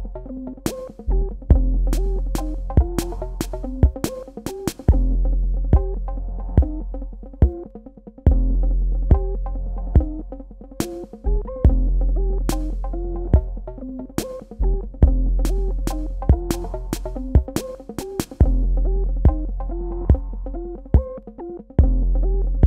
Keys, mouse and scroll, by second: 1.3 click, 5.4 ctrl+space, 5.5 ctrl+click, 6.0 ctrl+space, 6.3 ctrl+click, 6.5 ctrl+space, 7.3 click, 7.4-8.6 typing, 7.7 click, 8.0 click, 8.3 click, 8.5 click, 9.6 ctrl+alt+click, 11.3 ctrl+click, 12.5 ctrl+click, 13.7 ctrl+alt+click, 15.5 ctrl+alt+click, 17.2 right click, 18.5 click, 22.5 scroll down 1.